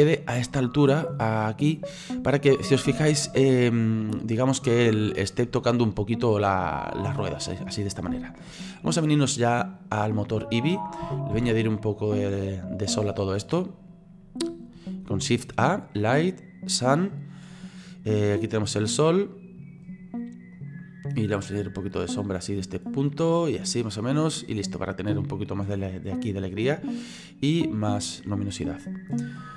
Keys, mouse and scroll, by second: 2.0-3.2 middle drag, 3.2-4.0 shift+scroll up 4, 4.0-8.7 middle drag, 8.7-9.8 scroll down 4, 9.8 click, 10.5-11.3 scroll down 4, 11.3 shift+a, 17.7 scroll down 1, 18.5-20.7 drag, 21.7-24.8 drag, 24.8-27.0 middle drag, 27.0-29.5 drag.